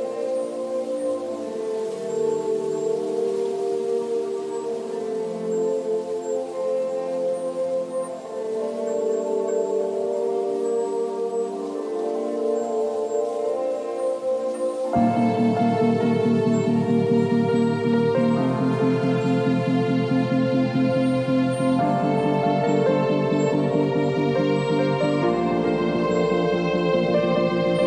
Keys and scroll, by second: 0.2 v, 2.2 v, 2.7 ctrl+a, 3.0 ctrl+c, 3.4 ctrl+w, 3.9 Return, 5.6 ctrl+v, 5.9 ctrl+t, 12.7 Delete, 17.0 b, 18.2 [, 21.0 ], 23.7 v, 24.6 space, 25.4 ctrl+a, 25.9 ctrl+c, 26.3 ctrl+w.